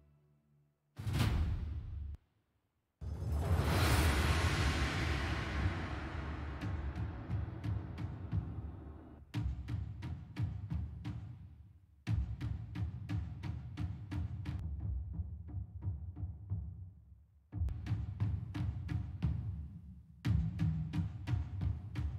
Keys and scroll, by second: 2.4 space, 3.0 space, 9.6 super+=.